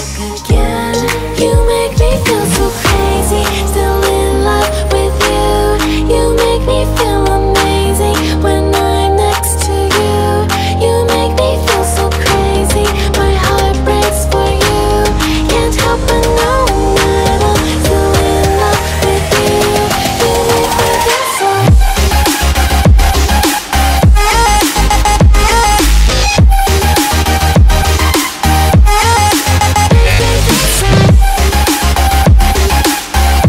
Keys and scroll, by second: 0.2 2, 2.9 0, 2.9 Return, 4.8 2, 4.9 F4, 6.1 F4, 6.4 2, 6.7 F3, 8.0 F3, 8.5 F4, 9.4 F4, 9.7 2, 10.3 F4, 10.3 2, 11.3 F4, 11.8 F4, 15.5 e, 19.0 F4, 22.0-22.8 typing.